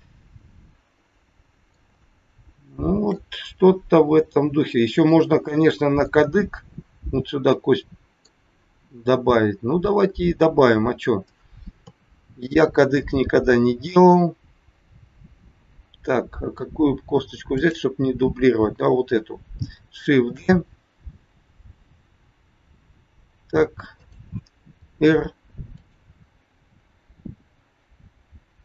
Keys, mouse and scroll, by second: 2.0 shift+middle click, 4.6 middle click, 5.6 middle click, 11.7 KP_3, 17.5 click, 20.4 shift+d, 24.8 r.